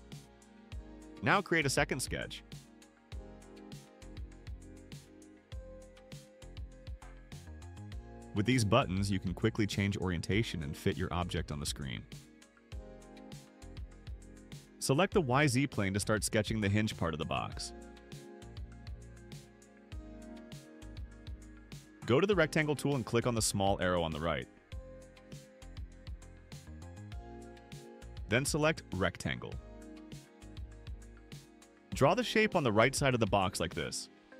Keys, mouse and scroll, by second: 5.1 click, 8.5 click, 11.5 click, 17.8 click, 19.4 scroll up 1, 19.9 scroll up 2, 20.2 middle click, 26.8 click, 27.4 click, 31.1 click, 33.8 click.